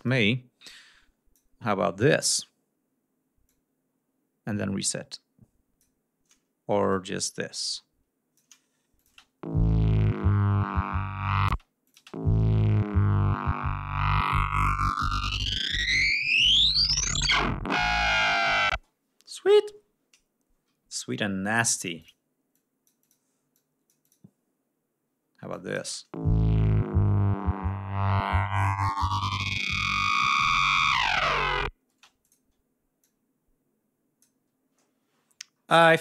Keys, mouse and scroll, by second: 0.3 click, 1.6 click, 3.1-5.6 drag, 6.6-8.3 drag, 8.7 click, 8.8 space, 11.2 space, 11.5 click, 13.8 ctrl+scroll down 2, 14.1 ctrl+scroll up 2, 18.4 space, 19.4 r, 20.5 d, 21.2 click, 22.2 click, 23.2 click, 25.2 click, 25.5 space, 30.0 click, 30.4 click, 31.6 space, 31.9 click, 32.7-34.1 drag, 34.9 ctrl+scroll down 2, 35.3 ctrl+scroll up 2.